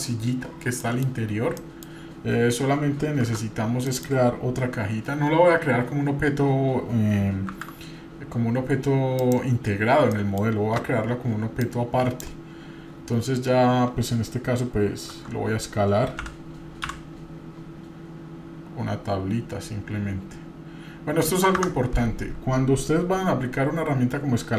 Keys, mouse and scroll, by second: 0.8 middle click, 1.2-1.7 scroll up 2, 1.6-3.3 middle drag, 3.3 Tab, 3.9 middle click, 9.8 scroll down 1, 10.1 middle click, 11.6-12.2 drag.